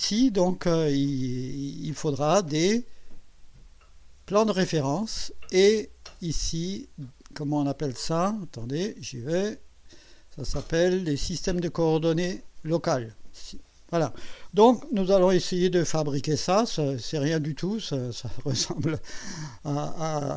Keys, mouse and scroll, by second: 8.6 click, 15.6-20.3 drag.